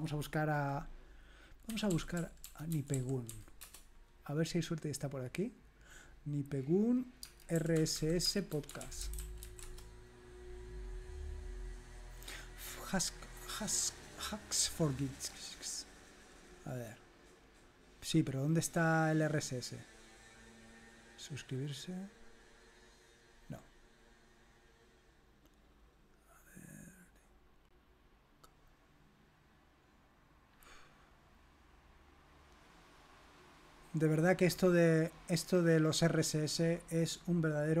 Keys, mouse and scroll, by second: 1.5-3.8 typing, 7.1 click, 7.3-9.9 typing, 12.3 click, 16.9-17.9 scroll down 2, 18.3-19.1 scroll down 3, 19.5-23.6 scroll up 3, 24.0 click, 29.0-30.6 scroll down 2, 30.6-31.4 scroll up 2, 33.9 click.